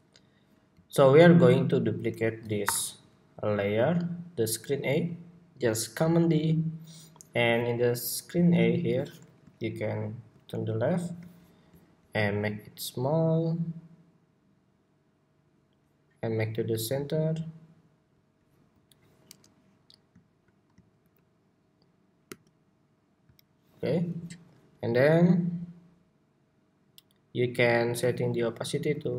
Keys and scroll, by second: 2.3 super+y, 6.0 super+d, 20.7 alt+shift+Left, 21.8 alt+shift+Left, 22.0 alt+shift+Right.